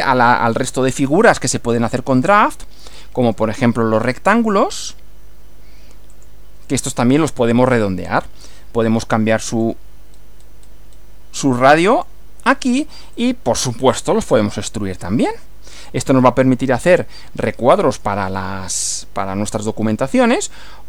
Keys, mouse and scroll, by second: 0.9 click, 2.2 click, 3.3 click, 4.7 click, 6.1 click, 8.1 click, 9.6 click, 10.1 scroll up 1, 11.9 click, 13.1 click, 14.3 click, 15.9 click, 17.0-18.3 middle drag.